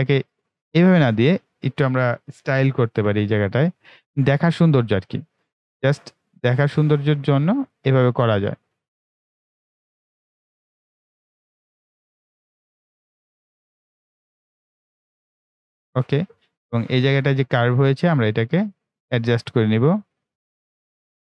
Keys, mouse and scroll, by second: 0.8 Delete, 2.9 ctrl+w, 4.0 click, 7.6 click, 15.3 click, 16.2-16.5 scroll up 1, 16.9-17.8 ctrl+scroll up 1, 18.2 right click, 18.9-21.2 drag.